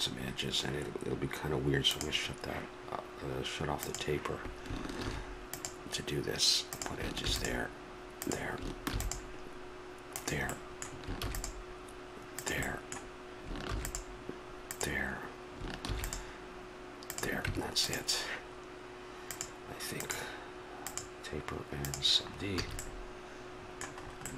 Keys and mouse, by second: 0.1-1.9 middle drag, 1.9-5.0 drag, 5.0 ctrl+r, 17.5 Tab, 22.3-23.6 drag, 22.6 a.